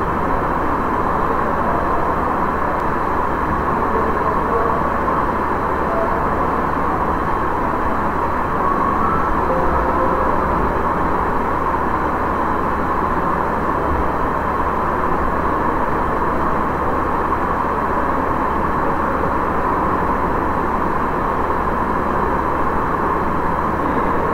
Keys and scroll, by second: 2.8 ctrl+v, 9.7 space.